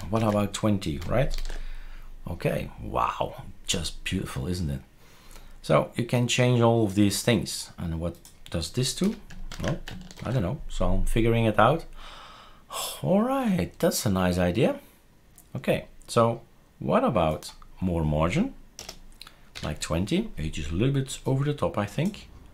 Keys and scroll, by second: 0.1 ctrl+s, 1.3 shift+super+r, 9.0 0, 9.5 ctrl+s, 10.2 shift+super+r, 18.8 BackSpace, 19.5 BackSpace.